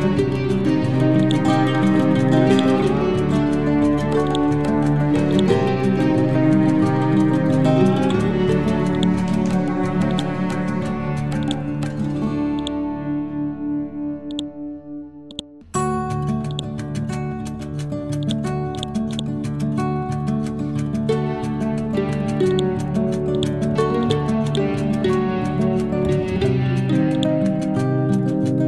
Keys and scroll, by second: 20.7 ctrl+Home, 23.8 e, 25.3 Left.